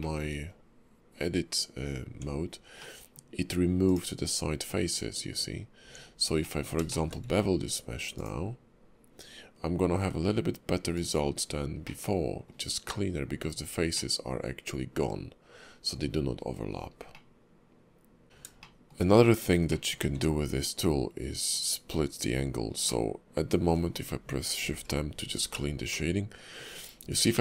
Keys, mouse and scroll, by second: 0.0 shift+middle click, 0.3 scroll up 2, 2.1 Tab, 2.8 middle click, 3.9 click, 5.4 scroll down 2, 5.8 Tab, 6.4 middle click, 6.9 shift+middle click, 7.3 q, 11.4-11.9 scroll up 3, 11.9 middle click, 13.9 middle click, 16.5 scroll down 3, 17.1 middle click, 18.2 ctrl+z, 18.4 scroll up 1, 18.6 shift+middle click, 19.7 middle click, 20.0 q, 23.6 middle click, 26.1 shift+middle click.